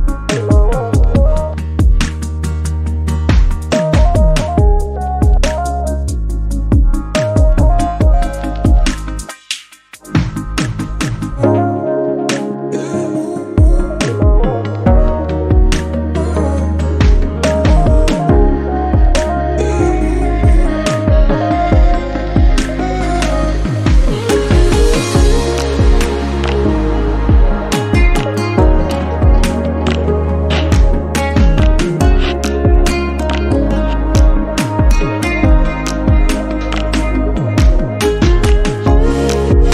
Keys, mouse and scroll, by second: 0.9 ctrl+z, 1.1 click, 1.3 click, 1.9 x, 2.8 click, 3.9 shift+middle click, 4.6 click, 5.2 x, 5.7 shift+middle click, 6.1 click, 7.4 click, 7.6 click, 8.2 x, 9.0 click, 9.6 click, 10.7 x, 11.3 click, 11.7 click, 12.8 click, 13.3 shift+middle click, 14.0 click, 14.6 x, 15.8 click, 16.3 click, 16.5-16.9 scroll down 7, 16.9-17.9 shift+middle drag, 17.9 scroll up 2, 18.1 shift+middle click, 19.1 click, 19.8 click, 19.9 scroll down 3, 20.1 shift+middle click, 20.7-21.3 scroll up 2, 21.3 shift+middle click, 22.1 scroll up 1, 22.3 click, 22.8 click, 23.8 click, 24.4 scroll down 1, 24.6 shift+middle click, 24.8 scroll up 1, 25.1 shift+middle click, 25.3-25.7 scroll down 8, 25.7 shift+middle click, 26.6 scroll up 5, 26.8 shift+middle click, 27.1 Tab, 27.3 click, 27.4 Tab, 27.8-28.2 scroll up 1, 28.2 click, 29.7 click, 30.0 click, 30.5 x, 31.1 click, 31.8 click, 33.2 click, 33.8 click, 34.1-34.4 scroll down 1, 34.5 shift+middle click, 34.7 scroll down 3, 34.9 shift+middle click, 35.1 scroll up 3, 35.3 shift+middle click, 36.5 Tab, 36.7 click, 36.9 Tab, 37.3 scroll down 2, 37.6 shift+middle click, 37.8-38.5 scroll up 4, 38.5 click, 39.5 x.